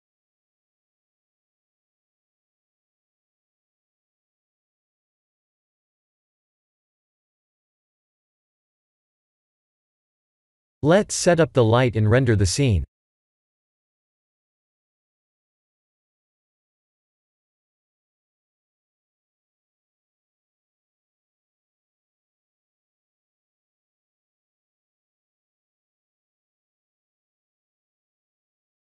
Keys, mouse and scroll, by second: 0.9 middle click, 2.3 KP_7, 4.4-5.4 typing, 8.4 KP_0, 10.2 click, 13.5 click, 14.5 click, 15.1 1, 15.3 1, 15.7 1, 16.8 click, 17.2 1, 17.6 1, 17.8 1, 21.9 click, 22.4 5, 22.8 5, 22.9 5.